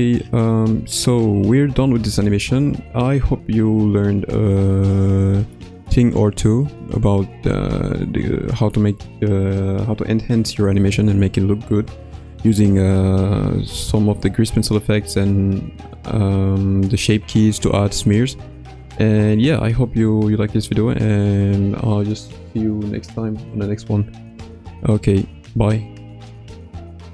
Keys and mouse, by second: 5.6-5.9 shift+middle drag.